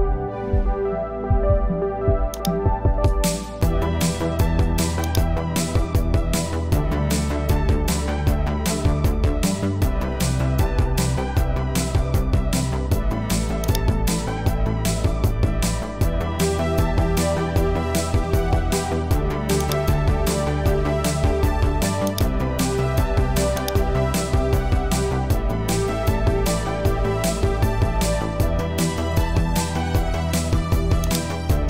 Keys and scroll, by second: 0.4 super+j, 3.3 BackSpace, 8.0 super+i, 10.5 super+m, 25.2-27.0 typing, 28.9 super+a.